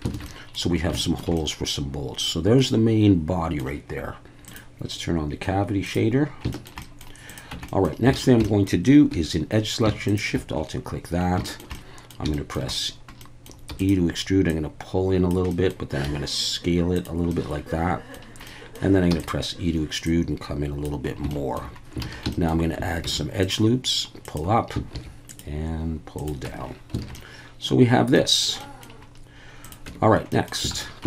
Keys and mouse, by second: 0.1 alt+a, 0.3-0.6 middle drag, 1.0 shift+middle click, 1.4-3.6 middle drag, 4.5-6.1 drag, 6.5 shift+middle drag, 6.9 middle click, 7.3 click, 7.5 Tab, 7.7 middle click, 8.1 alt+a, 8.4 shift+middle click, 9.1 2, 11.5 shift+middle click, 11.8 middle click, 12.4 shift+middle click, 13.2 middle click, 13.7 e, 14.6 click, 15.5 middle click, 16.0 s, 16.9 click, 17.3 middle click, 18.5 middle click, 19.1 e, 19.2 click, 20.0 click, 21.3 shift+middle click, 22.0 alt+a, 22.3 shift+middle click, 23.0 ctrl+r, 24.2 click, 24.9 ctrl+r, 26.2 click, 26.4 Tab, 27.0 alt+a, 27.1-28.1 middle drag, 28.6 middle drag, 29.9 Tab, 30.3 middle click, 30.7 alt+a.